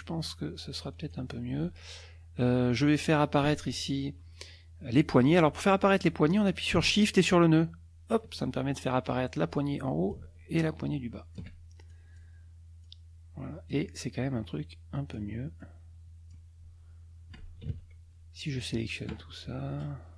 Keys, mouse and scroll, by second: 0.0-1.3 drag, 7.0-8.3 shift+drag, 10.1-11.5 shift+drag, 11.9 shift+click, 12.9 click, 15.1-16.5 drag, 17.7 ctrl+a.